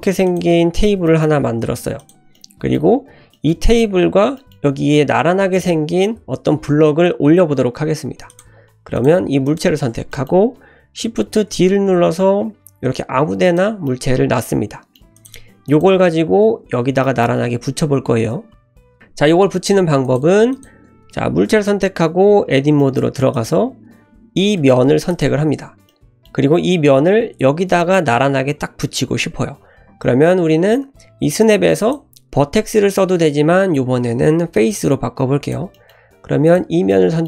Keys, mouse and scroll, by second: 0.4 `, 0.7-1.0 scroll up 2, 1.0 shift+middle click, 1.6 g, 2.3-2.7 middle drag, 2.8-3.2 scroll up 2, 3.3 shift+middle drag, 4.4 middle click, 8.3 click, 8.6-8.9 scroll down 1, 8.9 click, 9.4 click, 10.1 middle click, 11.5 shift+d, 13.8-14.9 middle drag, 15.1 click, 15.6 click, 17.0 middle click, 18.4-18.7 scroll down 1, 18.7 middle click, 20.0 click, 20.5 click, 21.5 Tab, 22.8 shift+middle click, 23.3 click, 24.6 3, 25.1 click, 25.9 middle click, 27.8 middle click, 31.8-35.3 drag, 34.8 l, 35.4 click, 35.7 middle click, 36.4 click, 36.9 middle click.